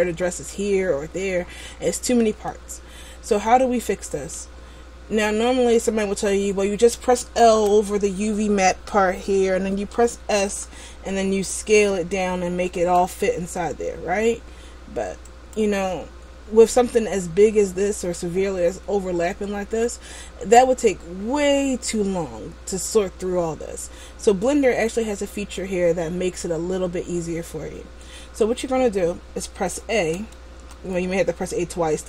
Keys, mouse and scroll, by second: 1.5-2.6 scroll down 3, 2.6 middle click, 4.9 scroll down 1, 7.8 l, 17.9 click, 20.9 scroll down 1, 30.0 a, 30.6 a, 31.2 a.